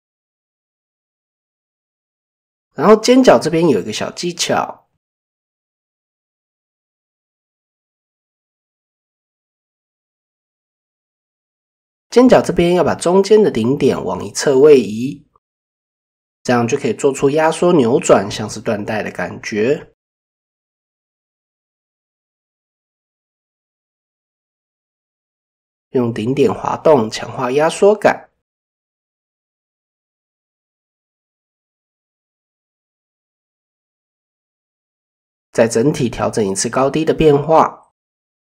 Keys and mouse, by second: 0.3 shift+middle click, 1.1 middle click, 3.3 right click, 4.5 ctrl+z, 4.5 middle click, 5.4 middle click, 6.1 middle click, 7.4 click, 7.8-9.5 middle drag, 9.8 middle drag, 10.9 KP_7, 12.1 click, 13.2-17.3 drag, 18.0 Tab, 20.4 Tab, 20.4-22.7 drag, 27.6 ctrl+z, 27.7 ctrl+x, 30.9 middle click, 31.7 click, 32.5 middle click, 33.6 middle click, 34.2-35.3 middle drag, 35.6 click, 36.2 click, 37.1 middle click, 38.0 middle click.